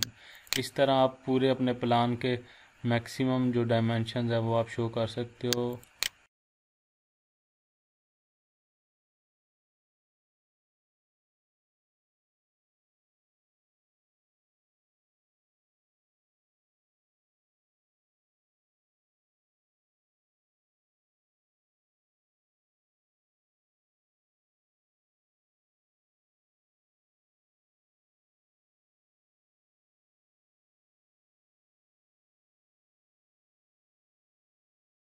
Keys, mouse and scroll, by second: 0.3 click, 1.4 scroll down 1, 2.1 scroll down 1, 2.2 scroll up 1, 4.2 scroll up 1, 5.0 scroll up 1, 5.7 click, 6.1 scroll down 1, 16.8 click, 20.4-21.6 drag, 26.8-27.8 drag, 30.5-31.0 scroll down 1, 31.0 scroll up 1, 32.8-34.4 shift+middle drag.